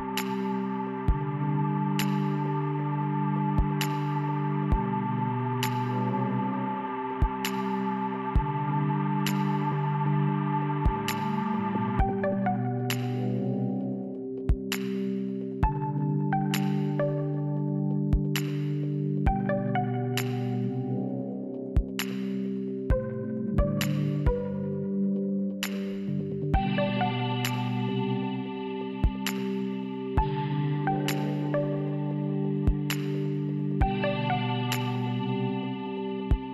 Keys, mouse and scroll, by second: 7.2 ctrl+z.